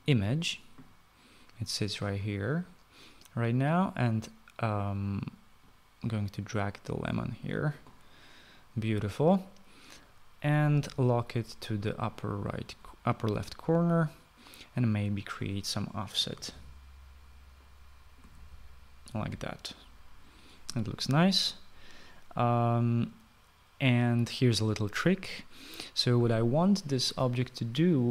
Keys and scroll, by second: 16.9-19.9 typing.